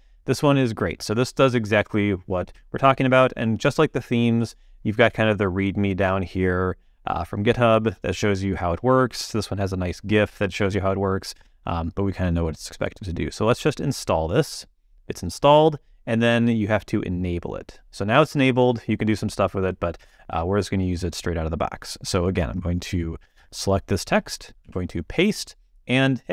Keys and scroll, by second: 24.6 super+v.